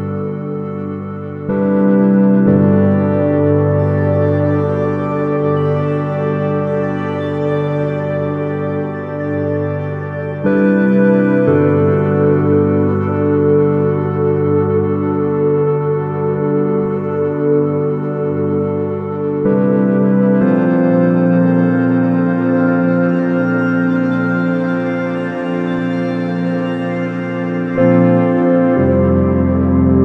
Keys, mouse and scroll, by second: 0.9 shift+a, 5.2 s, 11.2-14.4 drag, 14.7 KP_0, 17.0-18.9 drag, 20.3-22.2 drag, 23.4-25.1 drag, 25.6-27.4 drag, 28.5-30.0 drag, 29.7 s.